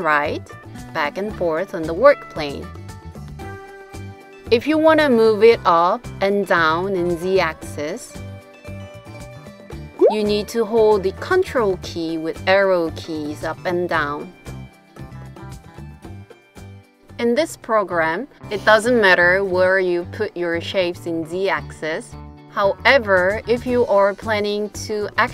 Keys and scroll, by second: 3.1 super+Up, 3.3 super+Up, 10.2 super+Up, 10.5 super+Up, 10.7 super+Up, 13.9 super+Down, 14.5 super+Down, 14.5 super+Down.